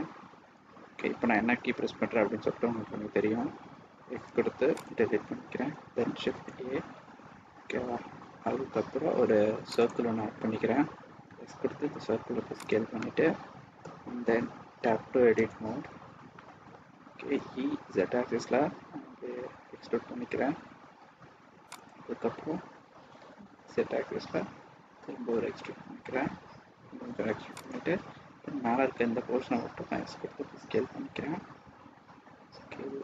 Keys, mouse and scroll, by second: 0.5 n, 4.1 x, 6.1 shift+a, 12.9 middle click, 13.7-14.2 scroll up 2, 15.3 Tab, 15.7 scroll down 1, 16.3 middle click, 17.3 e, 23.1 e, 28.8 s.